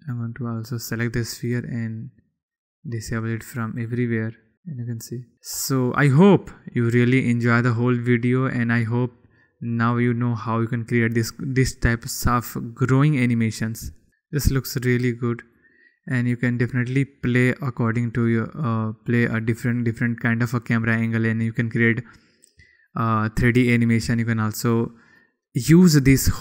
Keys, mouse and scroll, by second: 0.2 click, 2.2 click, 2.8 click, 3.3 click, 4.5 click, 9.6 click, 10.6 click, 14.5 click, 16.3 click, 17.6-18.2 drag, 18.2-19.2 middle drag, 19.2-20.2 drag, 20.2-21.5 middle drag, 23.0 middle click, 23.1 click, 23.7-24.1 middle drag, 24.9-25.3 middle drag, 25.3 middle click.